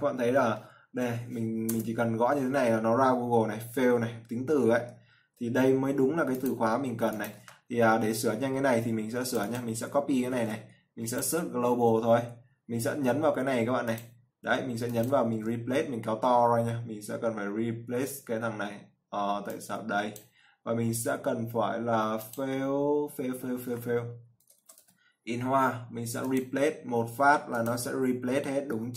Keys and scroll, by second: 10.7 ctrl+c, 12.0 ctrl+v.